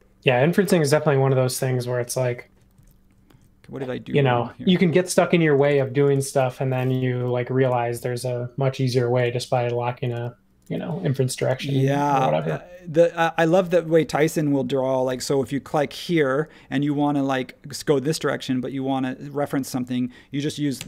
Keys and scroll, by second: 0.4 super+z, 0.6 super+z, 0.8 super+z, 7.2 space, 9.3 ⟲, 10.6 e, 11.5 Return, 13.5 space, 15.0 |, 20.7 Right.